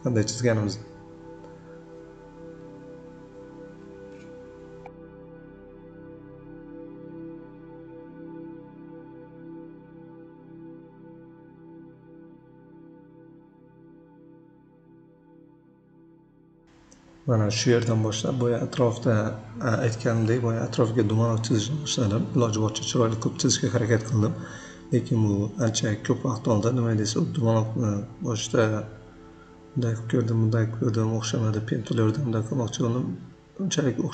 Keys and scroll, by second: 2.3 v, 12.2 p, 18.0 shift+c, 33.9 ctrl+z.